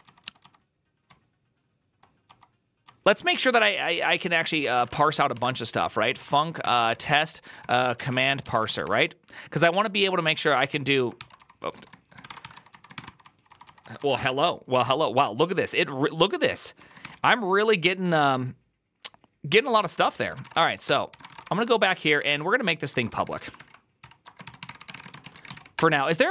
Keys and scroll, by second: 0.0-17.9 typing, 0.3 Return, 15.1 ctrl+c, 19.4-26.3 typing, 21.0 ctrl+c, 21.4 Return, 21.4 ctrl+u.